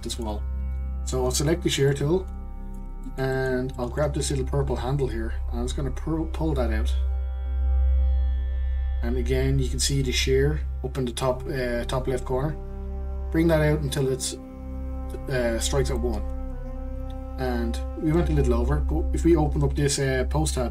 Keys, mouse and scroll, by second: 0.1-1.4 middle drag, 1.4 click, 1.9-5.0 middle drag, 5.0 click.